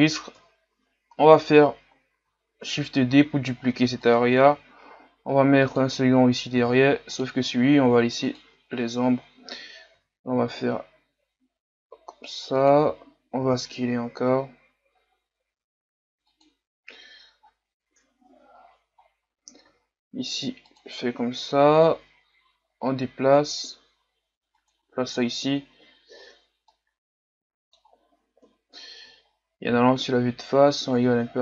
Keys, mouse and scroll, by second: 0.4 KP_3, 1.3-2.0 scroll down 6, 2.0 scroll down 1, 2.7 shift+d, 4.4 r, 6.6 g, 8.3 click, 8.9-9.9 scroll up 3, 9.9 r, 13.5 s, 18.7 scroll up 1, 19.0-19.6 scroll down 1, 19.6 r, 21.6 g, 26.8-28.5 middle drag, 28.5 KP_1, 29.4-29.9 scroll down 2, 29.9-30.9 scroll up 4, 30.9-31.3 scroll up 1, 31.3 scroll down 2.